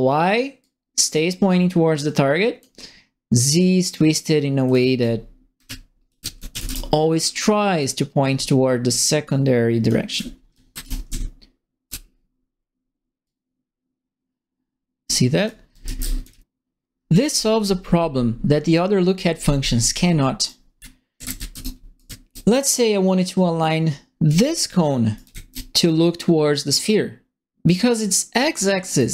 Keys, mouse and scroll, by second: 0.6-2.5 drag, 4.6 click, 4.9-7.0 typing, 5.0-6.7 right drag, 7.8-9.8 drag, 9.9-11.5 typing, 10.1-11.8 right drag, 13.2-15.0 drag, 15.1-16.8 typing, 15.4 right click, 20.5-22.0 typing, 20.5-21.6 right drag, 21.9 right click, 24.2 right click, 24.9-25.8 typing, 25.1 right click, 28.8-29.1 typing, 28.9 right click.